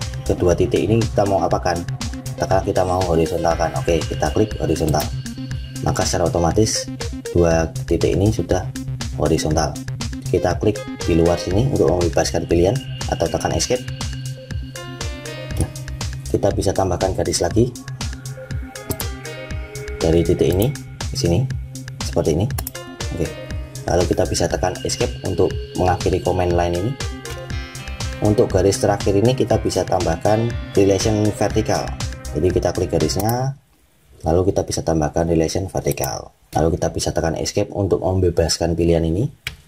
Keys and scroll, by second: 13.6 Escape, 24.9 Escape, 37.3 Escape.